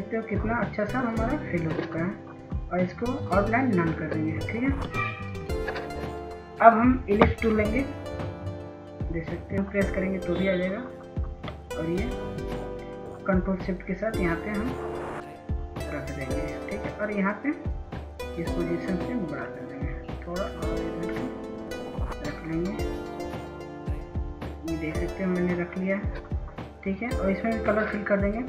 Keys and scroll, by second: 3.8 ctrl+space, 10.7 ctrl+s, 11.6 ctrl+s, 11.9 ctrl+s, 12.0 ctrl+s.